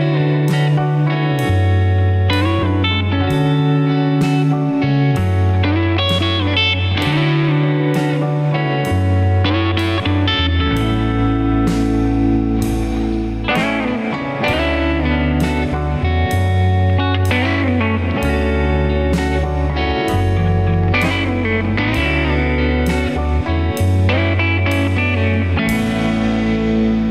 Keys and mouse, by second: 5.5 g, 17.0 alt+shift+click, 18.4 alt+shift+click, 24.3 alt+shift+click, 26.0 ctrl+b.